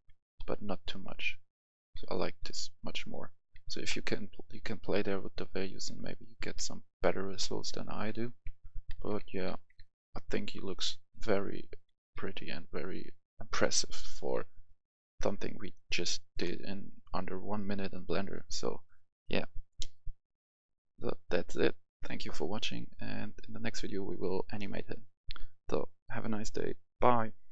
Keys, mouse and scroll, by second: 0.0-0.4 typing, 1.5-9.7 typing, 16.8-17.5 typing, 20.5 typing, 20.5 click, 20.6 F10.